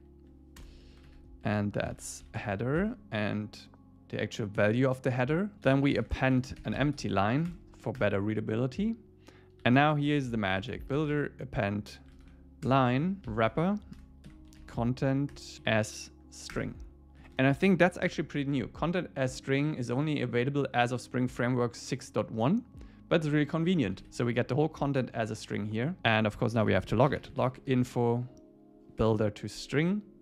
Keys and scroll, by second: 0.9 Left, 2.8 Tab, 7.5 Return, 12.7 Return, 13.2 Left, 14.0 Return, 15.7 Down, 16.5 Return, 17.2 Left, 18.1 super+b, 25.0 super+w, 26.0 Return, 29.0 Tab, 29.9 Tab.